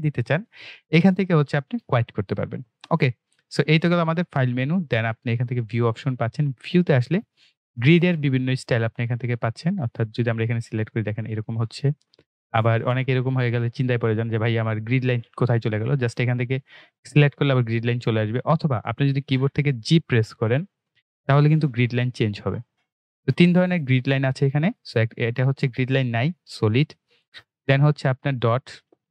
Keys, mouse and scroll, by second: 10.1 click, 16.8 click, 20.1-21.1 typing, 22.2-23.0 typing, 24.4 typing, 27.2 g.